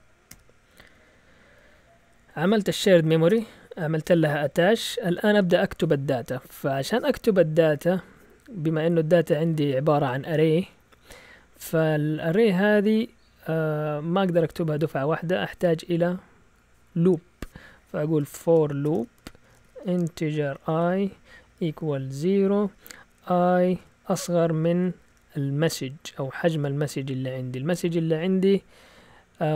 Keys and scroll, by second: 0.0-1.6 typing, 3.2 Return, 17.8-22.6 typing, 23.7 typing, 24.8 typing, 26.2-27.0 typing.